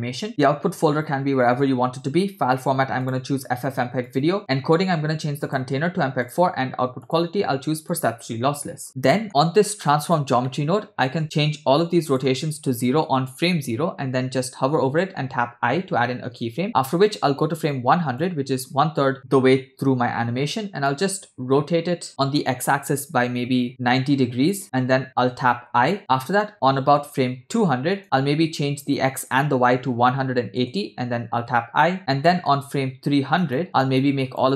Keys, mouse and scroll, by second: 0.3-1.5 drag, 0.3-1.2 scroll down 4, 1.2 /, 3.0-4.2 drag, 4.4 click, 4.6-5.3 scroll down 2, 5.4-6.4 drag, 7.0-8.1 drag, 8.8-10.1 scroll up 3, 9.1 middle click, 9.3 middle click, 10.1 click, 10.5 middle click, 11.8-13.1 shift+drag, 14.9 i, 16.6 click, 17.7 click, 20.9-24.4 drag, 28.0 click, 28.8-30.7 shift+drag, 31.5 i, 32.0 scroll down 3, 32.2 middle click, 33.5 click, 34.0-34.5 shift+drag.